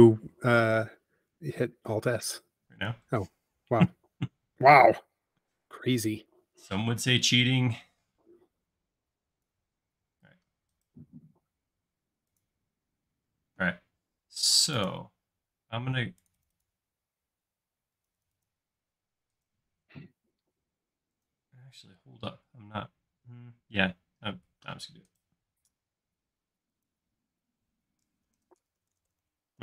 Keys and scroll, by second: 1.5 super+s, 6.0 p, 10.0 space, 13.7 space, 22.0 space, 28.1-29.6 typing.